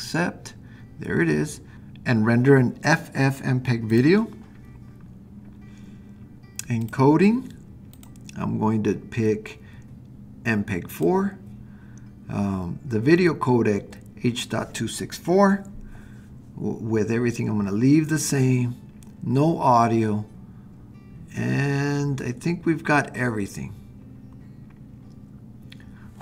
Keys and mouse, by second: 1.7 click, 6.8 click, 8.0-11.1 drag.